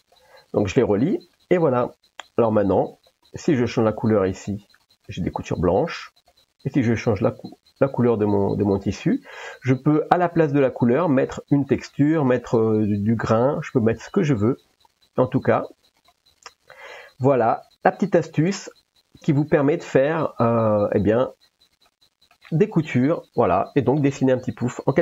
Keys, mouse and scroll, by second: 1.4-1.8 middle drag, 3.0 click, 5.1-5.4 middle drag, 6.2 click, 9.9 middle click, 11.3 click, 12.0 middle click, 14.6 shift+a, 16.9 s, 18.2 drag, 19.3 ctrl+s, 19.9 middle click, 22.1 middle click, 24.2 middle click.